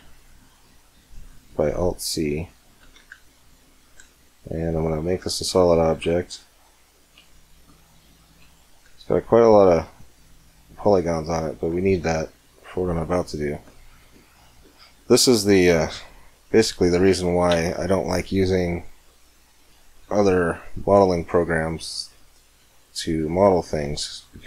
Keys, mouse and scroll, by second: 0.3 middle click, 2.3-4.0 right drag, 2.6 Tab, 4.0 middle click, 4.6-6.2 right drag, 5.3 f, 5.6 middle click, 6.4 middle click, 6.6 middle click, 6.8 middle click, 7.3-9.8 middle drag, 9.8-12.6 right drag, 12.2 f, 13.1 Tab, 13.6-14.2 middle drag, 17.3 ctrl+KP_7, 18.7-19.6 middle drag, 20.4 Tab, 21.8 c, 24.0-24.4 right drag, 24.1-24.4 middle drag.